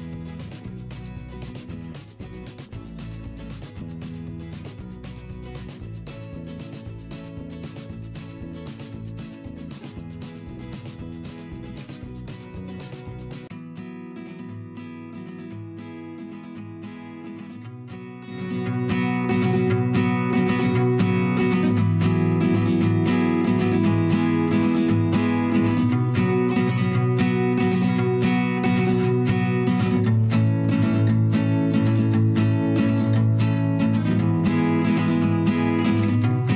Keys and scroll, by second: 1.4 ctrl+z, 1.8 l, 2.9 v, 3.7 shift+m, 4.1 v, 6.0 p, 7.7 v, 8.2 p, 10.5-14.1 typing, 18.2-20.7 typing, 21.9-24.4 typing, 24.2 ctrl+z, 26.3 shift+m, 26.9 v, 27.4 shift+m, 28.5 v, 29.1 ctrl+z, 31.4 shift+m, 31.8 v, 32.1 a, 32.6 v, 33.7 shift+m, 34.3 v, 34.9 shift+m, 36.1 v.